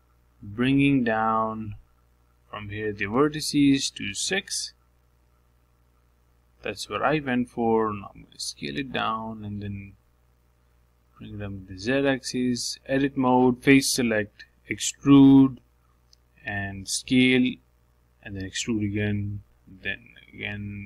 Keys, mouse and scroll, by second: 3.9-7.0 drag, 7.7-8.8 drag, 8.8 s, 11.3 s, 13.8 Tab, 14.1 middle click, 15.0 3, 16.1 click, 16.4-16.9 scroll up 3, 16.9-18.1 shift+middle drag, 18.1 e, 20.0 e.